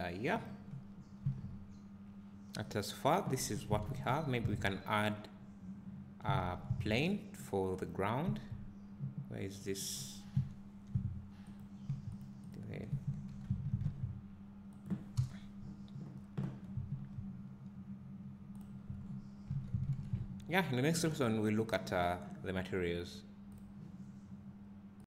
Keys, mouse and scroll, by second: 3.7 click, 8.2 s, 9.6 right click, 9.9 scroll down 1, 11.6 click, 12.2 x, 12.5 click, 13.3 alt+g, 16.9 s, 17.2 click, 19.6 alt+a.